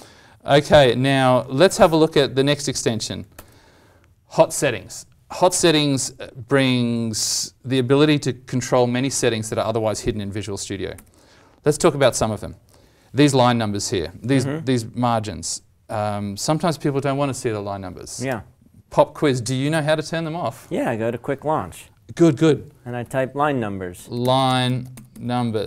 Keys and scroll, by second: 1.6 alt+Tab, 10.9 alt+Tab, 11.7 alt+Tab, 23.0 ctrl+q.